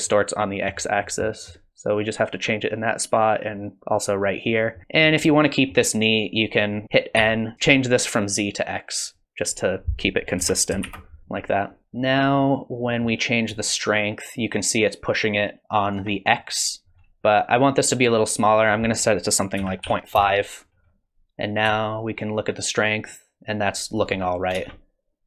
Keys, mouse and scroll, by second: 0.0 middle click, 0.9-1.9 scroll up 3, 1.2 middle click, 2.6 click, 4.8 middle click, 5.3 middle click, 6.4 click, 7.2 n, 7.5 click, 9.0 click, 11.2 click, 11.8 Tab, 11.8 click, 11.8 middle click, 11.8-12.3 scroll up 3, 12.9 middle click, 13.7 shift+click, 18.4 click, 21.8 shift+click, 24.5 space.